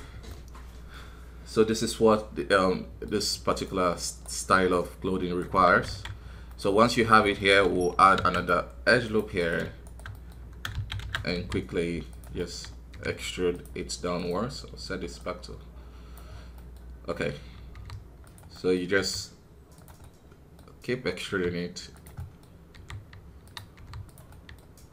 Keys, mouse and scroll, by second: 0.3-1.8 middle drag, 1.8 scroll up 2, 2.1-4.7 middle drag, 4.7 right click, 5.5 KP_1, 5.8 alt+a, 6.1 scroll down 1, 6.5 middle click, 6.9 scroll up 1, 7.2 middle click, 7.4 scroll up 1, 8.0 ctrl+r, 9.4 right click, 10.1 middle click, 10.7 shift+z, 11.0 shift+z, 12.3 middle click, 12.6 scroll up 1, 16.5-17.7 middle drag, 17.7 r, 18.5 middle click, 18.9 e, 20.0-21.2 middle drag, 21.2 e, 22.1 middle click, 22.7 e, 24.3-24.9 middle drag.